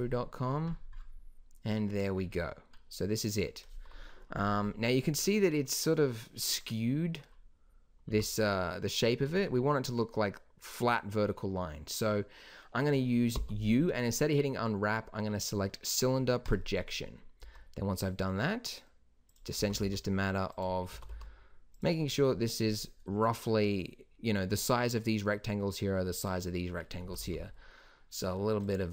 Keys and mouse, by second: 8.1 g, 13.3 u, 17.4 s, 19.5 s, 20.9 s, 27.0 s.